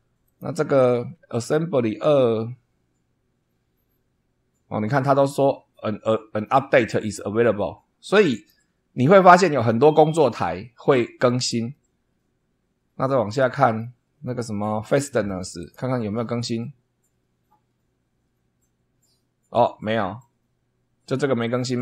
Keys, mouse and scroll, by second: 0.2 click, 8.3 click, 13.1 scroll down 1, 13.6-14.0 scroll down 1, 14.2 scroll down 2, 15.6 click, 21.5-21.8 scroll down 2.